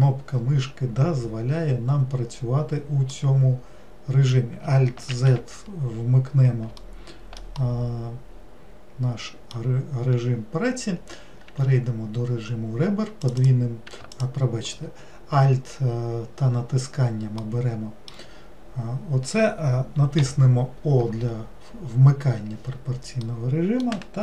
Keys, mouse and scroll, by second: 3.2-5.1 middle drag, 5.1 alt+z, 6.1-6.8 scroll up 1, 6.8 alt+middle click, 7.6-10.7 middle drag, 12.3-13.3 scroll up 1, 13.3 click, 13.4 click, 14.1 alt+click, 16.5-17.4 scroll up 2, 17.4-20.3 middle drag, 20.3 o, 23.2-24.2 middle drag.